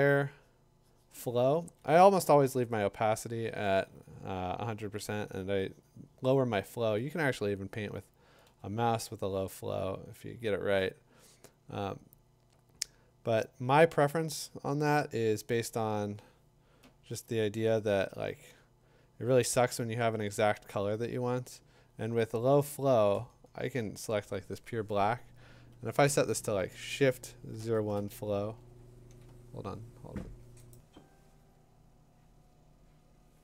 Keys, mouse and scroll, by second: 1.6 [, 3.8 [, 7.3 [, 7.9 [, 8.5 [, 8.7 ], 10.3 [, 12.7 [, 17.8-24.2 drag, 24.3-33.4 drag, 28.4 Tab.